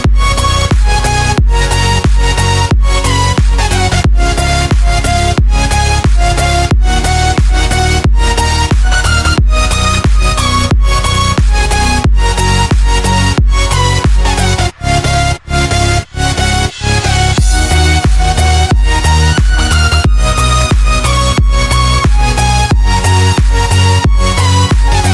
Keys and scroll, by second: 3.7 space, 5.7-7.2 typing, 8.9 x, 9.7 x, 11.7 space, 12.2 z, 13.3 x, 13.8 8, 16.0 z, 18.1 z, 19.0 space, 19.4 x, 19.7 z, 21.7 space, 21.9 z, 23.5 z, 24.9 3.